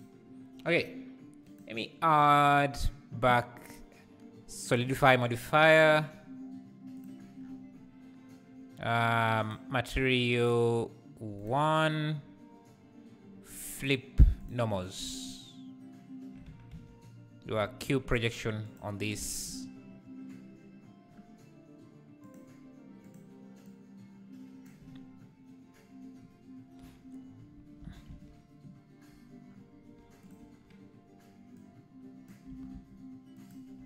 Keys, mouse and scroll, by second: 0.0 q, 7.0 click, 7.4 scroll up 1, 9.4-14.5 drag, 16.4 Tab, 16.7 a, 18.7 u, 19.2 Tab, 23.0 Left, 23.7 Left, 23.7-26.8 drag, 26.8 /, 28.1 alt+a, 30.3 click, 31.5 click, 32.5 g.